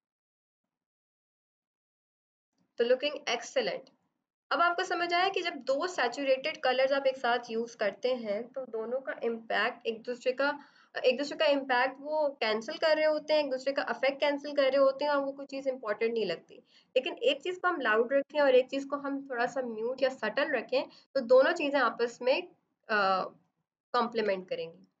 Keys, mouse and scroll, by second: 24.2 ctrl+-.